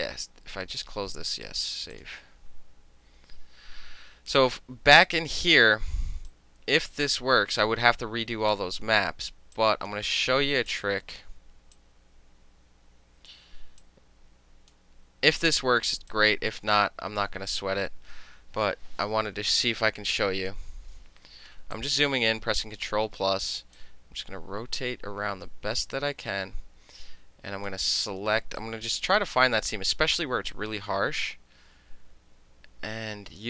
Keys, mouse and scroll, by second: 0.8 click, 2.0 click, 4.6-6.4 middle drag, 6.4-8.6 drag, 8.6-9.6 middle drag, 9.6 click, 10.0 middle click, 10.8 click, 10.9 middle click, 11.8-13.4 drag, 13.4 middle click, 13.9 click, 14.8 middle click, 15.5 click, 15.6 middle click, 16.2-17.3 drag, 17.3-18.8 middle drag, 19.4 ctrl+-, 20.6 ctrl+-, 21.3 space, 21.8 click, 22.5-23.8 middle drag, 23.8-27.7 drag, 28.7 click.